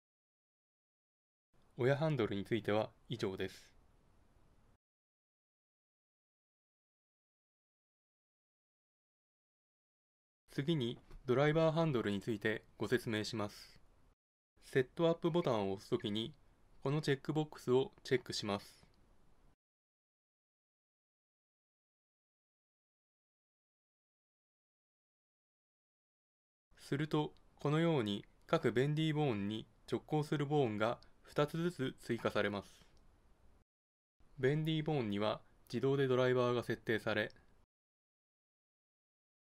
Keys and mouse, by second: 19.7-21.6 drag, 22.4-24.2 drag, 24.2 middle click, 24.6-26.4 drag, 26.4-34.0 middle drag, 34.3 Tab, 36.3 middle click, 38.1-39.5 middle drag.